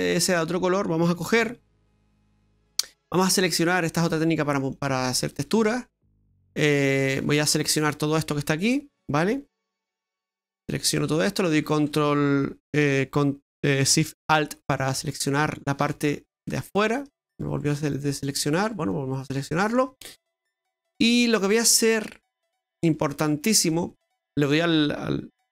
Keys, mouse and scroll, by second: 0.1 middle click, 1.4 Tab, 2.2 middle click, 2.7 right click, 4.1 click, 4.8 click, 5.3 right click, 5.6 shift+right click, 5.9 shift+right click, 6.3 right click, 6.6 middle click, 7.3 shift+right click, 7.9 shift+right click, 8.2 shift+right click, 8.6 shift+right click, 8.9 shift+right click, 9.6 middle click, 10.2 shift+right click, 10.9 shift+right click, 14.8 alt+shift+right click, 15.5 alt+shift+right click, 16.1 right click, 16.4 alt+shift+right click, 16.8 alt+shift+right click, 17.0 shift+right click, 17.4 shift+right click, 17.6 shift+right click, 17.9 shift+right click, 18.3 shift+right click, 18.6 shift+right click, 18.8 shift+right click, 19.2 shift+right click, 19.6 middle click, 20.1 shift+right click, 20.4 shift+right click, 20.8 shift+right click, 21.0 shift+right click, 22.2 shift+right click, 22.5 shift+right click, 22.9 shift+right click, 23.2 shift+right click, 23.5 shift+right click.